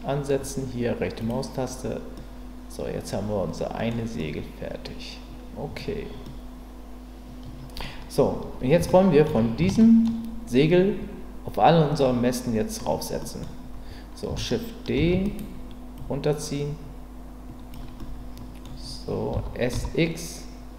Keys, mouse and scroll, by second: 2.1-3.9 middle drag, 4.2-5.8 middle drag, 6.3-7.8 middle drag, 8.9-9.3 shift+middle drag, 9.8 shift+middle drag, 13.2 middle click, 15.0 shift+d, 15.2-16.0 right drag, 16.0-17.7 drag, 18.0-19.3 middle drag, 19.3 s, 19.7 z.